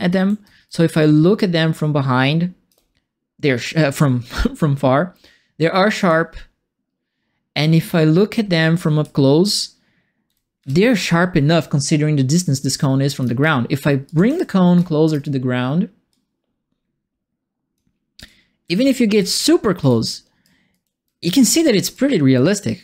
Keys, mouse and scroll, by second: 0.0-0.9 typing, 0.0-2.6 right drag, 5.9-11.0 right drag, 6.0 w, 7.5 a, 8.5 a, 9.0 q, 10.2 s, 10.5 a, 12.3-13.4 right drag, 12.5 s, 13.2 s, 14.0 click, 14.2 w, 14.7 right click, 14.7 s, 16.1-17.7 drag, 17.9-19.7 typing, 18.1-20.4 right drag, 20.7-21.9 right drag, 20.8 s, 21.4 w.